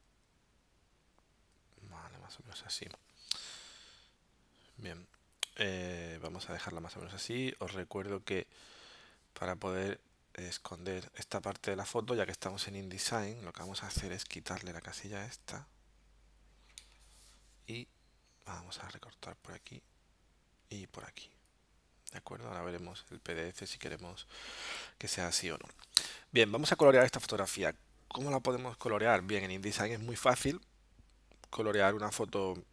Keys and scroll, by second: 14.3 alt+super+0, 16.9 alt+super+-.